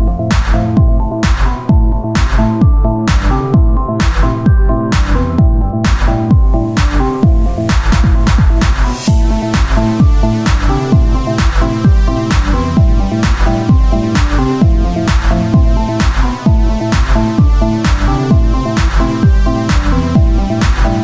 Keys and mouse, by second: 1.0-2.2 drag, 2.0 shift+d, 3.9-5.1 drag, 5.1 s, 7.2 z, 9.4-13.1 drag, 10.1 s, 13.1 s, 13.1 y, 13.9 s, 15.1 KP_1, 15.5 z, 15.9 Tab, 16.8 s, 17.9 Tab, 18.7 p, 19.2 Tab, 19.6 z.